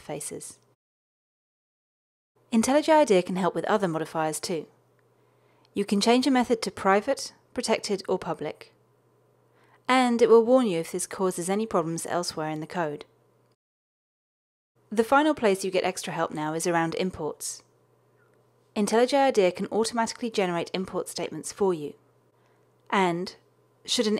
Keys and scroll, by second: 2.8 alt+Return, 7.4 alt+Return, 10.8 alt+Return, 19.9 alt+Return.